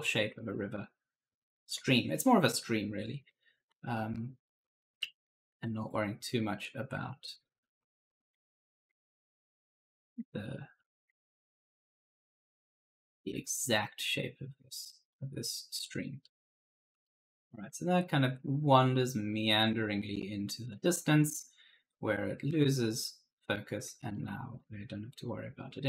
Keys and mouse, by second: 0.7 shift+click, 2.9-5.1 typing, 3.1 right click, 5.4 shift+click, 6.1 right click, 6.2 s, 6.9 shift+click, 7.4 right click, 7.5-8.2 typing, 7.7 right click, 8.3 shift+click, 9.0 right click, 9.7 shift+click, 10.4 right click, 11.2 shift+click, 12.1 right click, 12.3-14.0 typing, 14.7 shift+click, 16.0-17.4 typing, 16.1 right click, 18.4 shift+click, 19.5-20.5 typing, 19.8 right click, 21.2 shift+click, 23.9-25.8 typing, 24.0 right click, 25.4 right click.